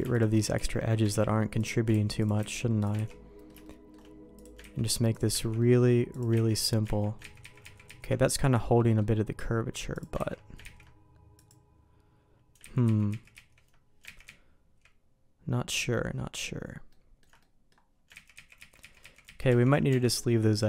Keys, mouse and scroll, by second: 0.1 alt+click, 0.5 ctrl+x, 1.2 ctrl+z, 1.5 click, 1.9 ctrl+x, 2.2 click, 2.5 ctrl+x, 2.8 click, 3.0 ctrl+x, 3.3 middle click, 3.6 shift+middle click, 4.3 click, 4.7 ctrl+x, 5.1 click, 5.5 ctrl+x, 5.5 middle click, 6.1 click, 6.4 ctrl+x, 6.5 click, 6.8 ctrl+x, 7.4 ctrl+z, 7.6 ctrl+z, 7.8 ctrl+z, 8.7 middle click, 10.3 ctrl+x, 10.6 ctrl+z, 11.3 click, 12.6 ctrl+z, 12.8 ctrl+z, 13.1 ctrl+z, 13.3 ctrl+z, 14.2 ctrl+z, 14.7 ctrl+z, 16.9 ctrl+z, 16.9 ctrl+middle click, 17.4 middle click, 18.1 ctrl+z, 18.3 ctrl+z, 18.5 ctrl+z, 18.8 ctrl+z, 19.0 ctrl+z, 19.2 ctrl+z, 19.4 ctrl+z, 19.9 Tab, 20.2 middle click.